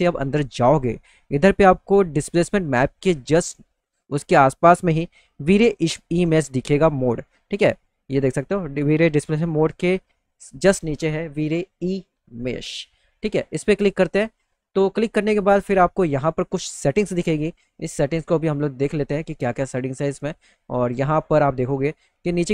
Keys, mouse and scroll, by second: 1.0 middle click, 1.5 middle click, 2.6-4.1 drag, 13.9 click, 20.9 click.